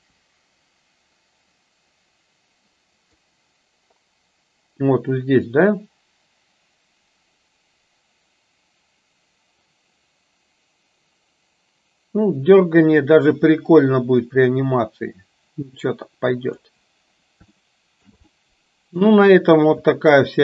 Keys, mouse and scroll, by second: 3.3-16.8 drag, 17.5-18.2 shift+middle drag, 18.4-19.2 middle drag, 20.0-20.4 shift+middle drag.